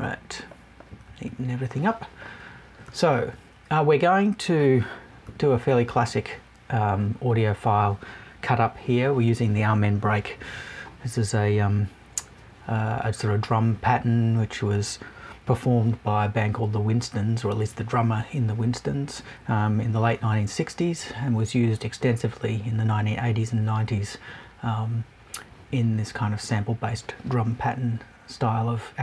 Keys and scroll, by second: 0.8 Left, 5.2 Right.